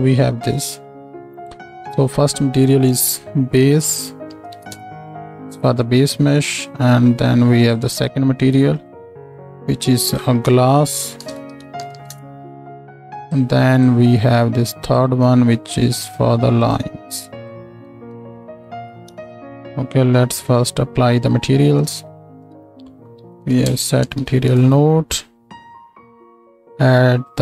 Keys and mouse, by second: 8.8 middle click, 9.3-16.0 drag, 11.9 s, 16.0 middle click, 16.6-20.7 drag, 20.7-26.4 middle drag, 22.5 shift+a, 26.4-27.4 drag.